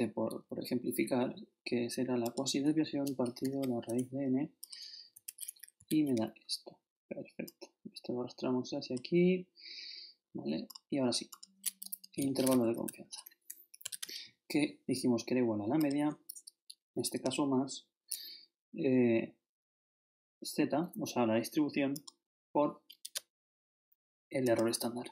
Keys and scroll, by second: 3.4 shift+7, 5.1 shift+Return, 5.8 shift+Up, 5.9 shift+Right, 12.1 shift+i, 12.8 shift+Up, 16.7 shift++, 23.0 shift++.